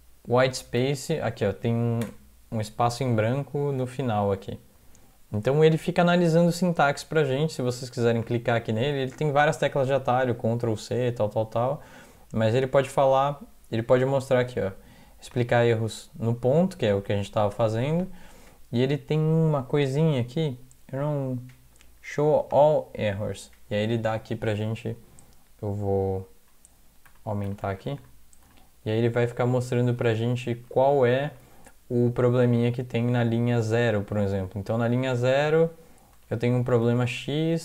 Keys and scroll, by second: 0.8 End, 2.0 BackSpace, 3.8 ctrl+s, 27.1 ctrl+=, 27.5 ctrl+=, 27.6 ctrl+=, 27.8 ctrl+=, 30.9 alt+Left, 31.4 alt+Right, 31.9 alt+Right, 31.9-33.7 alt+Right, 34.1-35.6 alt+Right, 36.1 alt+Right, 36.3 alt+Right, 36.5 alt+Right, 36.7 alt+Right, 36.8 alt+Right, 37.2 alt+Right, 37.4 alt+Right, 37.5 alt+Right.